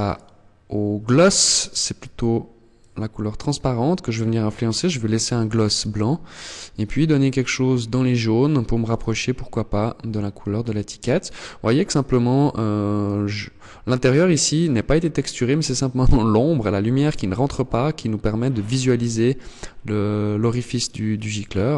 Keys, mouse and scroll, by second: 0.6 click.